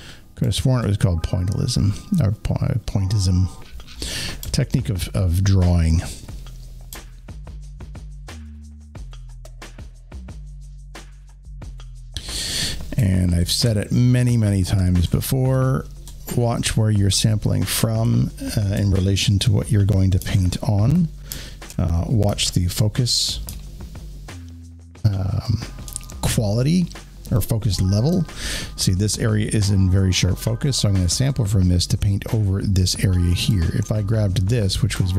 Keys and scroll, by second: 17.0 alt+space, 20.1 alt+space, 22.2 alt+space.